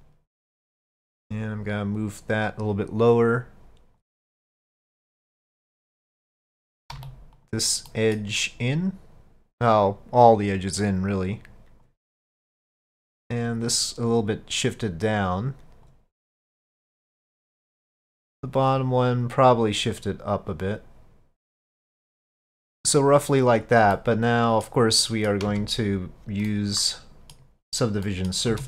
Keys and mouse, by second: 0.7 3, 1.3-4.0 drag, 4.4-5.9 middle drag, 7.0 2, 7.4 click, 7.9 middle click, 8.8-12.2 drag, 12.2 middle click, 13.1-16.0 drag, 16.3 middle click, 17.5 middle click, 18.9 click, 20.0-23.9 drag, 23.9 middle click, 25.0 middle click, 25.5 Tab, 26.5-27.4 middle drag, 28.1 middle click, 28.5 s.